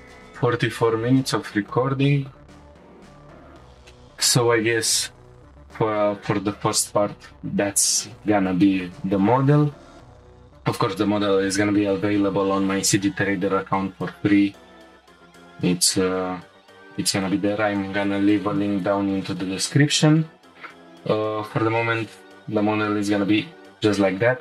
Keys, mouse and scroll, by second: 3.2 shift+middle click, 3.3-3.6 scroll up 1, 3.9-6.9 shift+middle drag, 7.9-11.8 shift+middle drag.